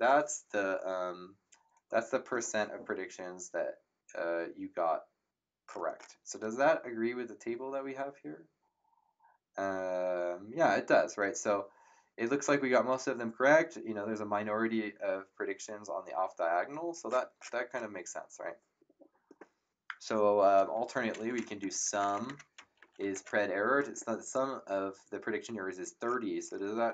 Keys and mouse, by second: 20.7 Up, 21.6 Home, 21.8 Delete, 22.3-23.5 typing.